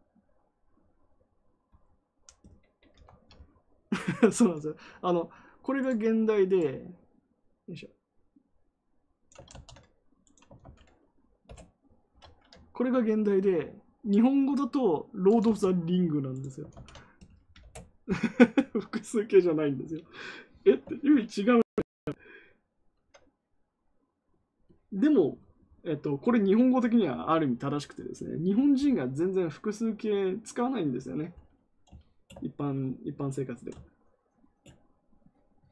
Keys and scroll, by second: 9.5 ctrl+c, 10.6 ctrl+v, 11.4 Return, 15.4 ctrl+c, 16.7 ctrl+v, 17.5 Return.